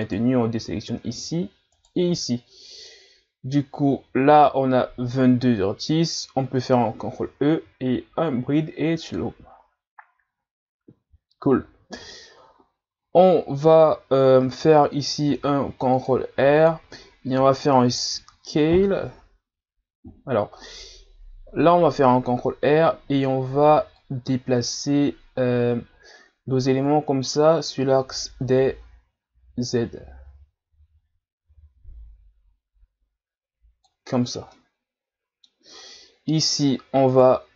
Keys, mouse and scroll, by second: 0.0 shift+right click, 1.7 shift+right click, 7.0 ctrl+e, 15.3 ctrl+r, 24.0 click, 34.2-34.5 shift+scroll up 3, 34.5-35.8 middle drag, 35.8-36.4 ctrl+scroll up 2, 37.1 right click.